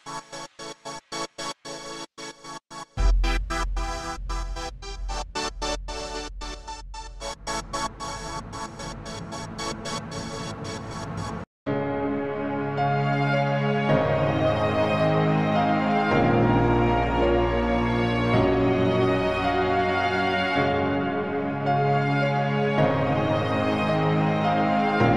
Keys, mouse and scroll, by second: 0.8 Tab, 1.0 s, 3.6 2, 3.8 ctrl+r, 5.3 middle click, 5.5 scroll down 7, 5.7 right click, 6.3 scroll up 3, 6.5 scroll down 1, 6.8 shift+r, 6.9 shift+r, 8.2 shift+r, 8.4 scroll down 3, 8.5 scroll up 4, 8.6 middle click, 9.2 ctrl+r, 10.7 ctrl+z, 10.7 ctrl+z, 11.1 shift+r, 11.6 right click, 12.6 shift+r, 13.1 shift+r, 14.3 ctrl+z, 14.9 Tab, 15.1 alt+a, 15.3 z, 15.6 scroll up 1, 15.7 middle click, 16.1 KP_0, 16.6 scroll up 1, 16.8 click, 16.9 scroll down 3, 17.0 scroll up 2, 17.7 right click, 17.7 scroll up 1, 18.5 right click, 18.9 middle click, 18.9 scroll up 1, 19.1-19.5 scroll down 5, 19.3 alt+a, 19.5 middle click, 19.5 scroll up 3, 19.6 click, 19.9 ctrl+Tab, 21.1 middle click, 22.2 ctrl+space, 23.5 click, 23.7-24.1 scroll down 4, 25.0 scroll down 2.